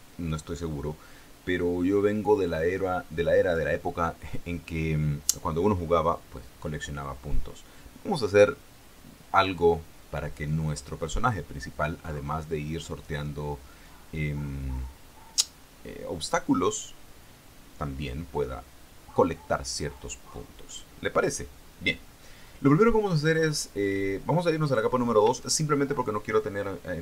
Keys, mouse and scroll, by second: 24.9 click.